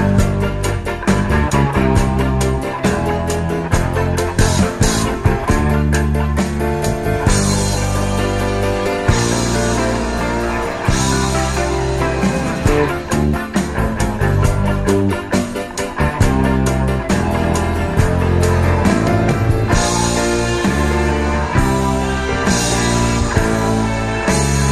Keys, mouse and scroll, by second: 21.4 Return.